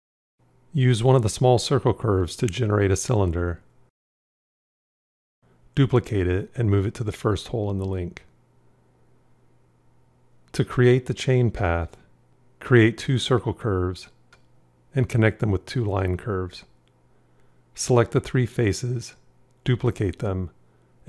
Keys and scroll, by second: 6.6 shift+d, 20.2 shift+d.